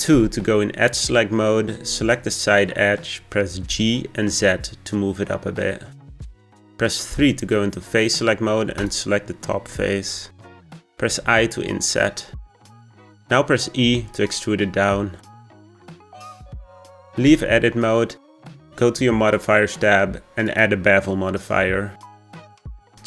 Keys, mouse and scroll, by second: 0.1 2, 0.8 middle click, 1.8 click, 2.6-3.6 scroll up 2, 3.6 g, 7.0 3, 8.7 click, 11.0 i, 13.8 e, 17.2 Tab, 19.2 click, 20.4-23.0 drag.